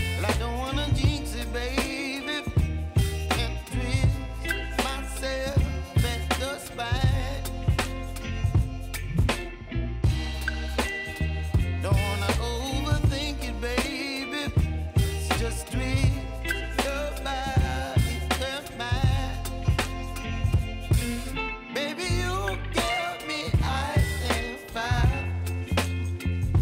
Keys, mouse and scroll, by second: 0.0 space, 2.0 click, 2.9 F9, 3.7 click, 4.4 space, 9.0-10.8 drag, 10.8-13.7 drag, 14.0 space, 16.8 scroll down 1, 17.6 click, 26.4 space.